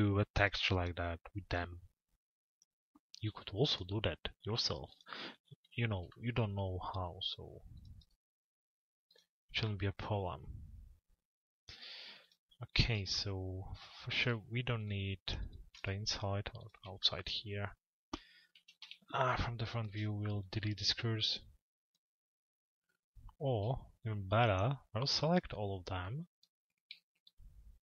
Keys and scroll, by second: 18.2 f, 18.8 z.